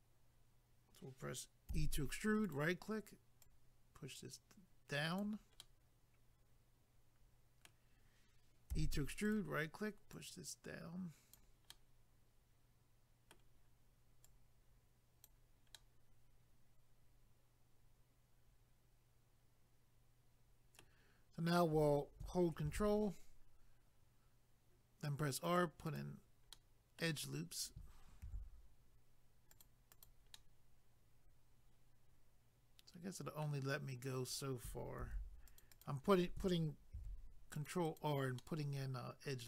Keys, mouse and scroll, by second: 2.5 right click, 2.6 right click, 3.4 click, 5.6 middle click, 8.7 e, 9.2 right click, 9.4 right click, 10.1 click, 11.7 middle click, 14.2 click, 15.7 middle click, 22.6 ctrl+r, 23.3-24.5 scroll up 1, 25.4 click, 25.6 click, 25.8 click, 26.0 double click, 26.5 middle click, 28.7-29.5 scroll up 1, 29.5 click, 29.6 click, 29.9 click, 30.0 double click, 30.4 middle click, 33.8 scroll up 1, 35.0 ctrl+r, 35.5 click, 35.6 click, 35.7 click, 35.8 double click, 37.0 ctrl+r, 37.6 click, 37.7 click, 37.9 click, 38.0 double click, 38.4 middle click.